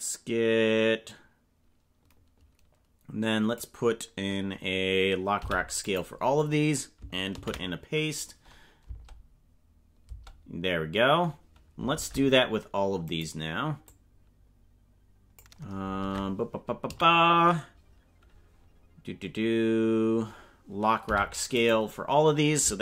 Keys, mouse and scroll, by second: 5.4 i, 7.5 ctrl+v, 8.8 space, 10.1 space, 11.9 ctrl+Tab, 13.0 right click, 13.9-15.4 drag, 16.0 ctrl+Tab, 16.8 a, 21.0 i.